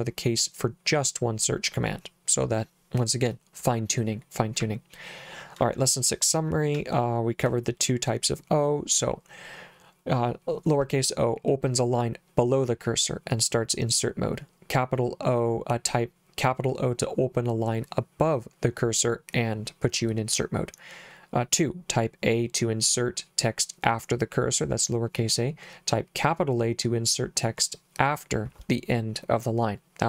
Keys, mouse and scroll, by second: 4.7 j, 5.8 j, 6.8 j.